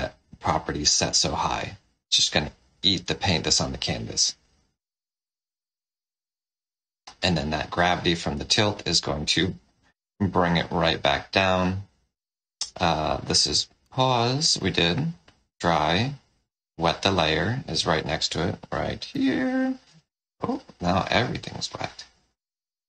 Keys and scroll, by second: 0.9 o, 13.7 d, 18.9 shift+l.